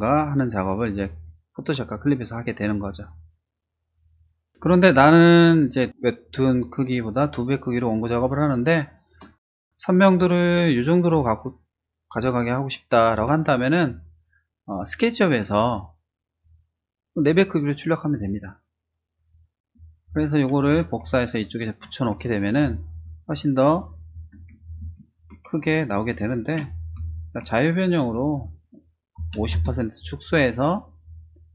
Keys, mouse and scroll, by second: 4.5 space, 4.7 click, 5.3-7.2 drag, 7.5-9.4 drag, 10.2 space, 10.5 click, 11.1-13.1 drag, 20.0 click, 20.7 ctrl+c, 21.4 click, 21.8 ctrl+v, 22.6 space, 22.8 click, 23.3 click, 24.8 ctrl+-, 25.5 space, 25.6 click, 26.5 ctrl+t, 27.8-28.7 typing, 29.5 click, 30.3 click.